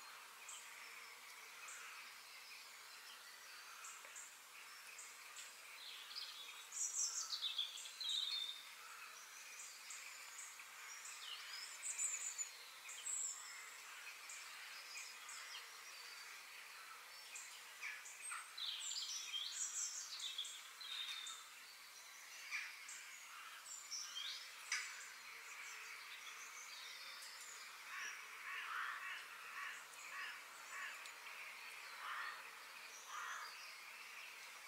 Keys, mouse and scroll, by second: 1.4 middle click, 2.1 click, 2.4 f, 10.9 KP_3, 12.0 g, 20.9 g, 22.4 middle click, 23.3-23.7 scroll up 2, 23.7 middle click, 24.2-24.6 scroll up 2, 24.8-27.4 shift+middle drag, 30.7 f, 34.0-34.6 middle drag.